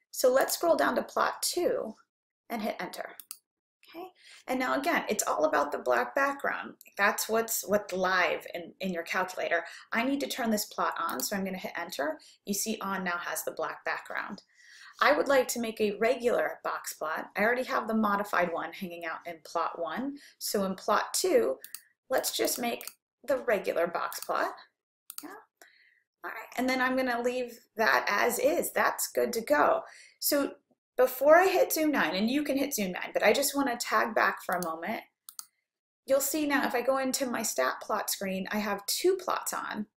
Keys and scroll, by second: 0.7 Down, 3.3 Return, 11.2 Return, 21.7 Down, 22.3 Right, 22.5 Right, 22.9 Right, 24.2 Right, 25.1 Return.